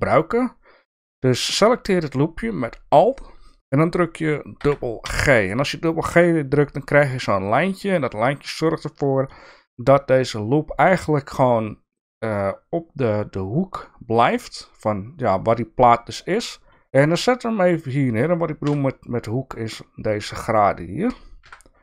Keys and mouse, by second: 4.5 g, 18.6 KP_3, 21.4 KP_1.